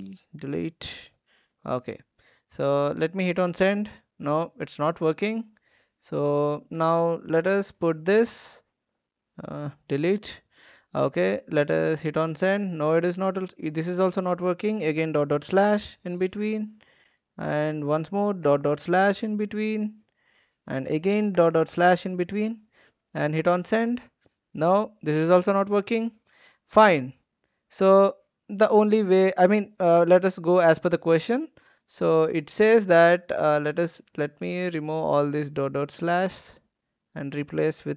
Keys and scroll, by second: 0.3 BackSpace, 1.0 /, 7.7 ctrl+v, 9.3 Delete, 14.9-15.3 typing, 18.4-18.7 typing, 21.3-21.6 typing.